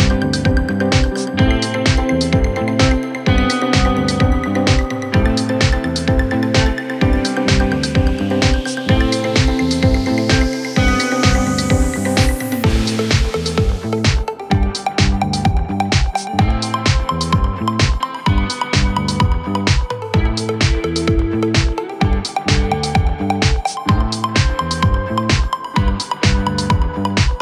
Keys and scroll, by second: 7.9 shift+F2, 8.1 F3, 16.0 shift+F2, 19.4 ctrl+z, 20.1 F3.